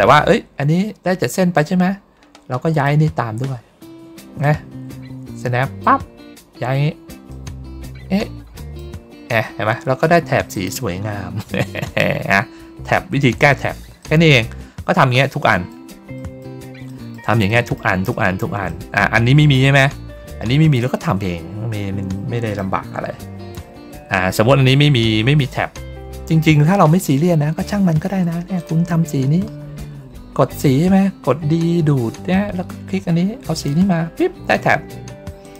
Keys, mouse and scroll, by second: 2.6 click, 4.3-5.7 drag, 7.2-8.7 drag, 10.4 click, 12.9 ctrl+middle click, 12.9 ctrl+scroll down 1, 13.9 middle click, 14.7 ctrl+middle click, 14.7 ctrl+scroll down 1, 15.3 middle click, 16.1 middle click, 16.8 middle click, 17.4 middle click, 18.0 middle click, 18.6 middle click, 19.1 ctrl+middle click, 19.1 ctrl+scroll up 1, 19.2 ctrl+scroll down 1, 19.9 ctrl+scroll down 1, 20.5-21.0 ctrl+scroll up 1, 21.6 middle click, 24.0 ctrl+scroll down 1, 25.3 ctrl+middle click, 25.8 ctrl+middle click, 27.5 ctrl+middle click, 28.5 click, 33.4 click, 35.3 click.